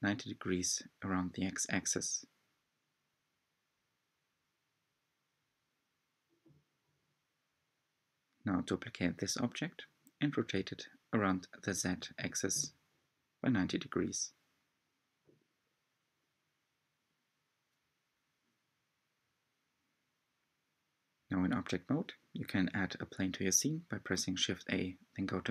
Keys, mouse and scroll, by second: 1.1-2.4 middle drag, 2.4-3.2 scroll down 1, 3.2-4.7 scroll up 3, 4.7-5.6 middle drag, 5.6 click, 6.4-8.9 middle drag, 8.9 click, 9.4-10.3 middle drag, 10.3 shift+d, 11.9-12.7 middle drag, 12.7-13.1 scroll down 1, 13.1 shift+d, 14.5-15.4 middle drag, 15.4 shift+d, 16.7 middle click, 17.3 click, 17.7-18.8 middle drag, 18.8 shift+a, 22.2 r, 25.4 middle click.